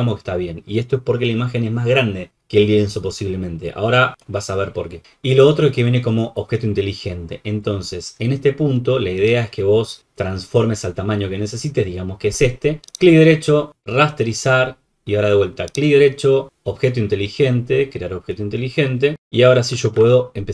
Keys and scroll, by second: 19.8 ctrl+t.